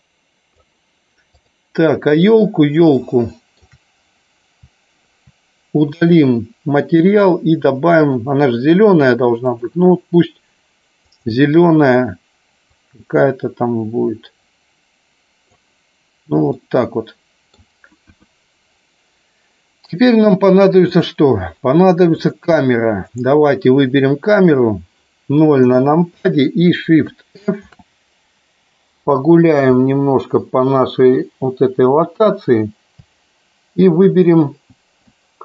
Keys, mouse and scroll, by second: 3.0 shift+middle click, 6.0 click, 8.2 click, 9.4 click, 16.5 middle click, 18.1 KP_1, 22.2 click, 23.1 click, 25.5 KP_0, 27.5 shift+f, 29.1 Down, 29.7-34.2 Left, 34.2 Right.